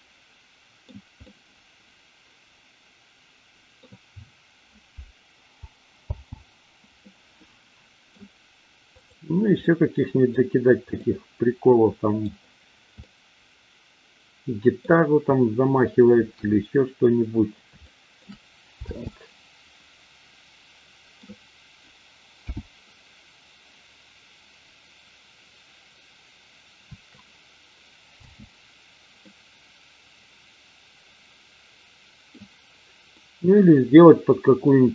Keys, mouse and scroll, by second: 1.2-3.7 middle drag, 6.0 space, 7.1-8.1 middle drag, 9.0 click, 9.7-10.3 middle drag, 11.0-12.2 middle drag, 13.1-14.7 middle drag, 16.2 KP_1, 17.8 shift+middle drag, 18.8 space, 19.8-21.2 middle drag, 22.5 n, 28.2 space, 29.2-32.3 middle drag, 33.2-34.6 middle drag.